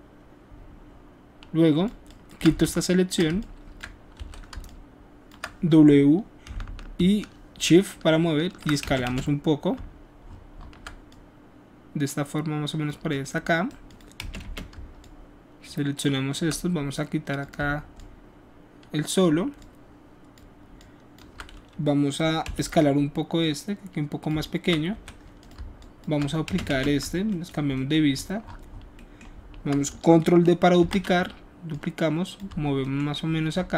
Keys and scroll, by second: 4.2 w, 8.8 shift+space, 14.2 space, 14.4 space, 22.4 r, 24.9 alt+w, 26.5 space, 26.7 space, 30.8 d.